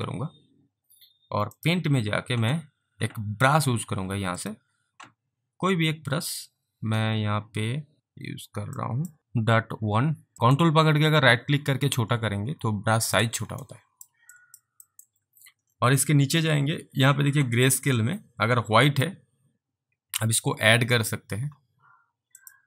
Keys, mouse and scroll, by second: 1.6 click, 4.4 click, 6.5-7.3 scroll down 1, 7.3-7.7 scroll down 1, 8.0 scroll up 3, 8.7 scroll up 1, 8.9 click, 10.3 alt+right click, 10.6 ctrl+right click, 13.7 alt+right click, 14.5 alt+click, 14.9 alt+middle click, 15.6-16.2 scroll down 3, 19.2 click, 20.9 ctrl+z, 22.4 click.